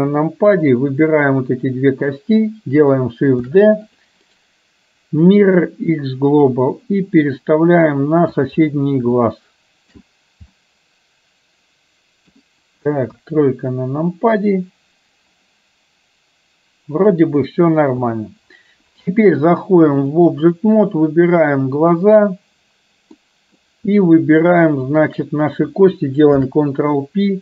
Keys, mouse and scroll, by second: 0.8 click, 3.5 shift+d, 4.5-5.8 right drag, 6.5-8.4 drag, 9.3 shift+middle click, 10.5-12.4 middle drag, 13.2 KP_1, 18.0 KP_3, 20.2 click, 23.3-23.7 middle drag, 24.9 shift+click, 26.4 ctrl+p.